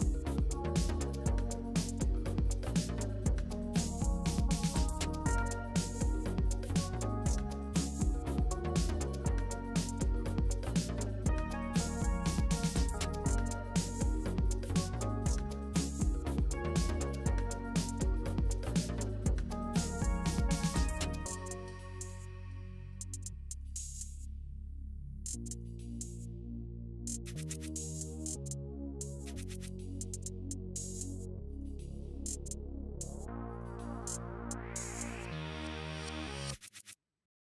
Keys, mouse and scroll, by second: 0.9-4.0 drag, 9.1 click, 9.7 click, 10.4 click, 12.3 click, 12.9 click, 13.3 click, 13.8 click, 14.6 space, 16.1 space, 18.0-20.2 drag, 20.2-21.9 middle drag, 21.9 click, 22.8 click, 25.8-28.4 drag, 28.4 s, 31.6 click, 32.8 g, 35.8-37.5 middle drag.